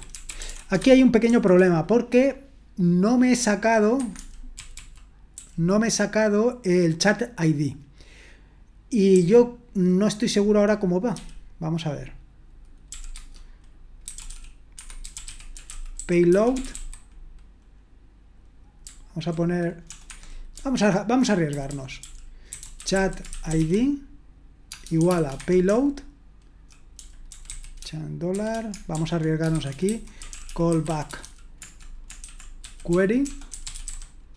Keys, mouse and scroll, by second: 0.0-1.5 typing, 4.5-5.3 typing, 13.9-17.2 typing, 20.5-34.3 typing, 25.4 Escape.